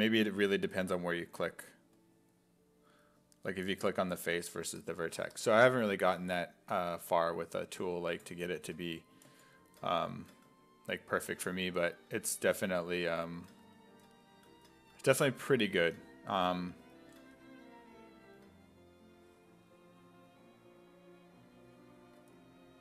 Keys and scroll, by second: 6.1 f, 7.0 f.